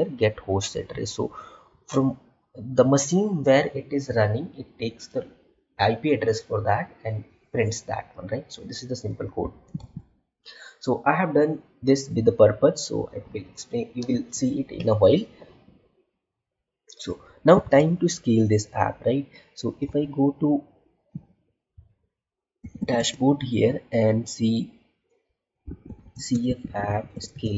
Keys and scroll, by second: 10.5 Tab, 18.0 alt+Tab, 19.9 alt+Tab, 22.9 space, 26.0 space.